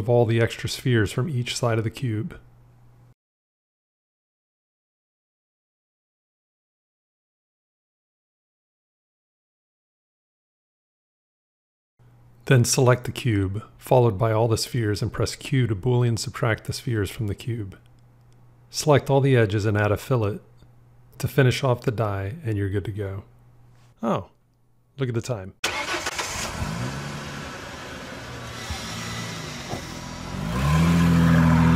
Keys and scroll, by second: 0.5 x, 15.2 q.